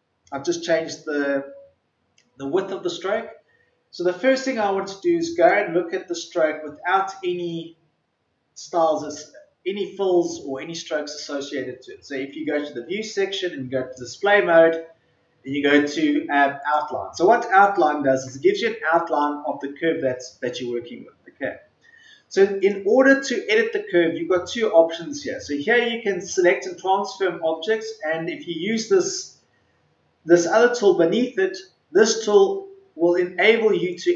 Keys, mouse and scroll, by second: 5.3 click, 17.6-18.2 scroll down 1, 18.5-18.9 ctrl+scroll down 1, 20.5-20.8 ctrl+scroll up 1, 22.5 click.